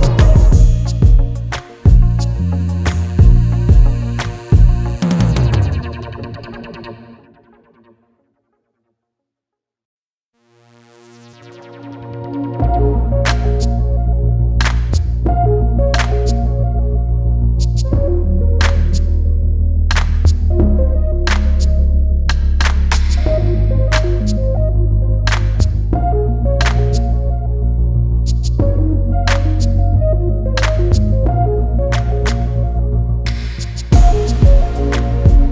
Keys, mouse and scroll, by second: 1.4 click, 4.5-5.1 scroll up 1, 5.1 click, 10.6 scroll down 1, 10.6 scroll up 1, 10.8 click, 17.9 scroll down 1, 21.5 scroll down 1, 22.1-22.9 scroll up 1, 23.6 click, 24.9 click, 29.3-29.8 scroll down 1, 30.1-30.6 scroll up 1, 31.0 click.